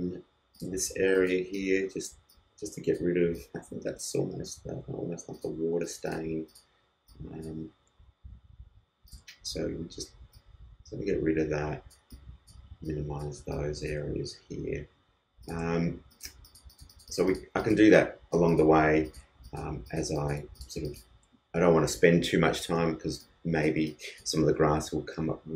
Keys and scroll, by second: 8.2 alt+super+z.